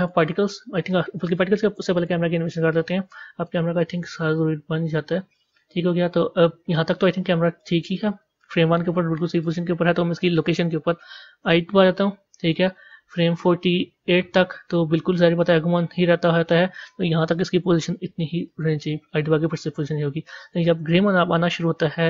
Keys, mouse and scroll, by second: 0.0 click, 2.1 click, 3.5-6.5 drag, 11.4 i, 12.9-16.4 drag, 18.3 i, 20.3-22.0 drag.